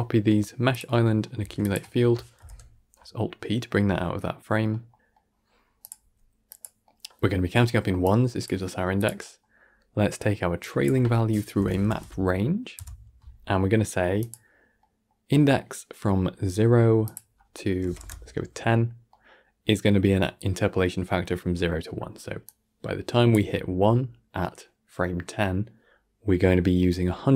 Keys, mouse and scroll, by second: 0.6 shift+click, 0.9 shift+middle click, 1.3 shift+d, 2.3 alt+p, 3.3 middle click, 3.7 g, 4.9-5.3 middle drag, 5.3 scroll up 1, 5.7 click, 5.9 g, 6.7-7.9 middle drag, 7.9 click, 8.4 g, 9.1-9.5 middle drag, 9.5-10.5 scroll up 4, 10.5 click, 14.7-16.9 middle drag, 16.9-19.0 drag, 19.0-22.0 middle drag, 22.3 click, 26.7 scroll down 7, 27.0-27.3 middle drag.